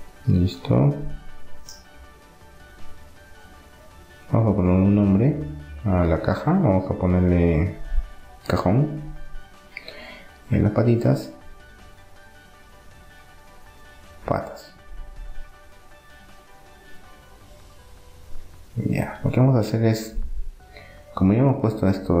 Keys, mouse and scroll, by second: 3.0-6.2 drag, 10.7-13.7 right drag, 11.9 click, 17.7-18.7 middle drag, 18.7-20.4 right drag, 20.7 middle click, 21.5-22.2 right drag.